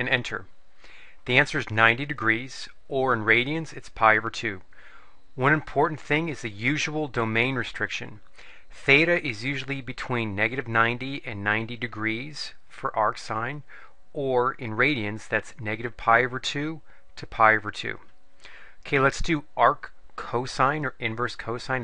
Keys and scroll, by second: 0.1 Return.